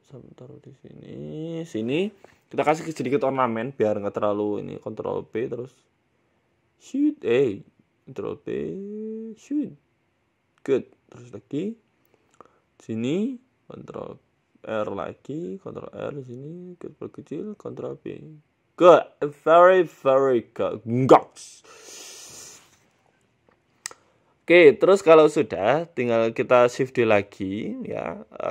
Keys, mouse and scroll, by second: 0.8 ctrl+r, 3.6 ctrl+r, 4.5 s, 5.7 ctrl+b, 8.4 s, 9.3 ctrl+b, 11.1 Tab, 11.7 Tab, 12.0 shift+middle click, 12.6 ctrl+r, 14.2 ctrl+r, 16.8 s, 17.7 ctrl+b, 18.7 Tab, 18.9 scroll down 2, 19.1 middle click, 19.5-20.0 scroll down 5, 19.7 middle click, 19.9 scroll up 1, 20.0 middle click, 20.3 scroll down 1, 20.7 KP_1, 23.6 shift+middle click, 24.6 right click, 25.2 shift+middle click, 25.8 g, 26.6 shift+middle click, 27.2 shift+a.